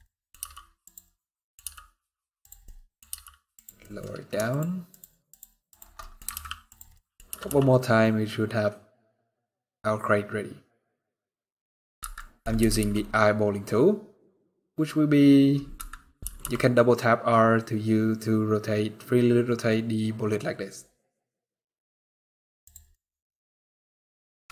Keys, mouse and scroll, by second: 0.1 g, 1.0 middle click, 1.3 g, 2.3 middle click, 2.8 g, 3.5 middle click, 4.2 shift+click, 5.7 middle click, 6.0 alt+d, 6.6 middle click, 7.0 r, 11.8 middle click, 12.3 r, 22.6 middle click, 24.2 KP_0.